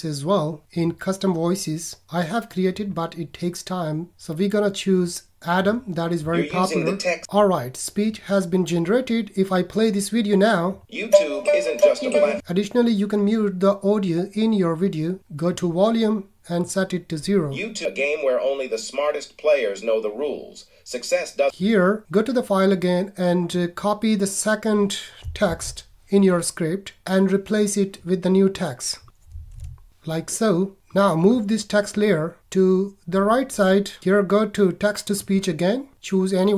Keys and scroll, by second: 25.4 super+c, 29.2 super+a, 29.6 super+v.